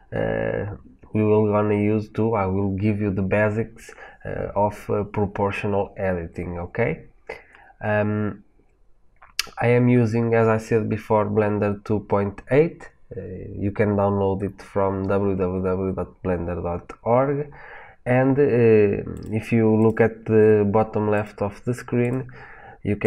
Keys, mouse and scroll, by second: 19.0 click, 19.7 click, 21.0 click, 21.9-23.0 drag.